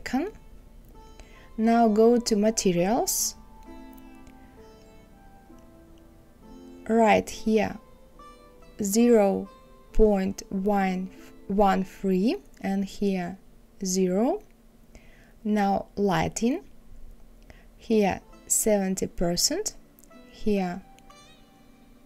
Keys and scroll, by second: 8.2 KP_1, 8.5 KP_3.